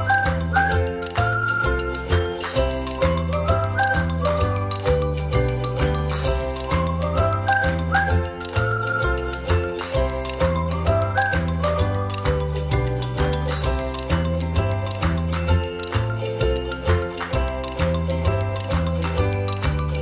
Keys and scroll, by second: 3.1 ctrl+-, 3.3 ctrl+-, 3.5 space.